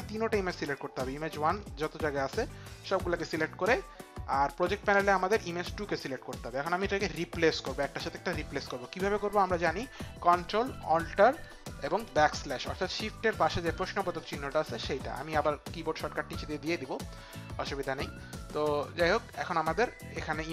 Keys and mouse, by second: 5.5 click, 18.4 click.